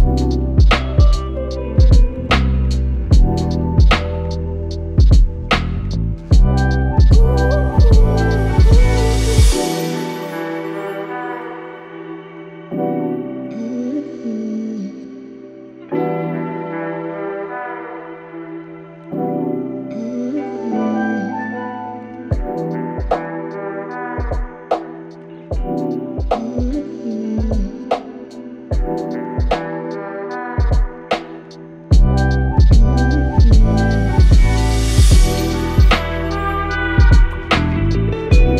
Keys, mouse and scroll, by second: 2.0 ctrl+g, 2.6-5.3 drag, 11.3 click, 11.4 click, 12.9 BackSpace, 14.4-16.5 typing, 18.0-23.3 drag, 23.3-26.1 drag, 30.6 click, 34.5 click.